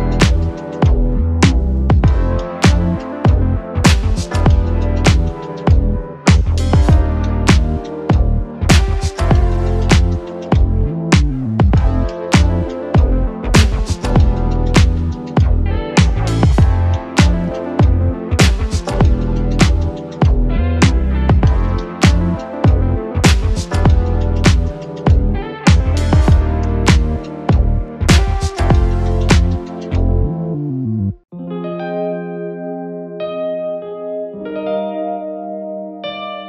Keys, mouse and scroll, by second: 0.2 click, 2.4 typing, 2.6-4.3 scroll up 1, 4.3-10.5 drag, 10.8 ctrl+space, 11.3-12.5 typing, 12.8 Return, 14.2-14.9 typing, 14.4 click, 17.5-18.2 typing, 18.4 click, 18.5 click, 21.3-31.9 drag, 31.9 right click, 33.7-36.4 drag.